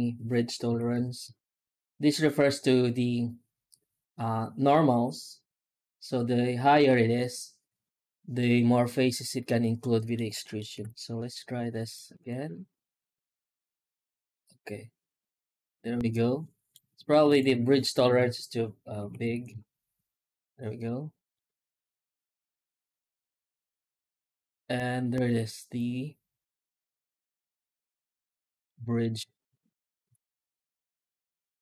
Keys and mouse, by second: 8.3 middle click, 8.5-10.0 middle drag, 10.3 middle click, 10.6 F9, 28.5-28.9 middle drag, 29.2 shift+middle click, 29.9 F9.